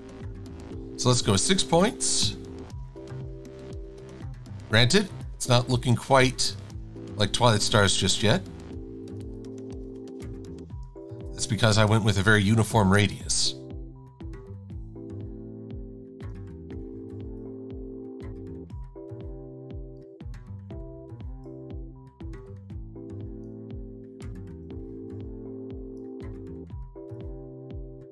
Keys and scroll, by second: 2.3 KP_Enter, 3.4 v, 4.3 e, 8.3 a, 11.5 super+=, 11.9 super+=.